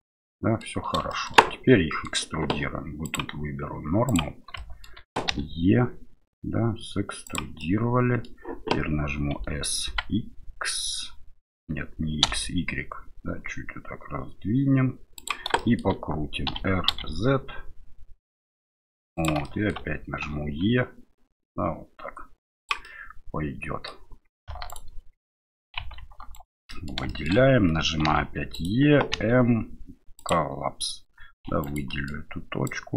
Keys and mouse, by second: 1.1 shift+middle click, 1.4 middle click, 3.2-4.3 drag, 4.6 shift+middle click, 5.3 e, 7.7 middle click, 9.3 s, 15.7 shift+middle click, 16.5 r, 19.5 shift+middle click, 20.2 e, 23.0 middle click, 24.7 alt+right click, 25.2 middle click, 25.8 2, 26.3 right click, 26.7 middle click, 27.1 middle click, 28.0 e, 29.1 m, 31.5 1, 31.6 right click, 31.9 middle click, 32.7 click.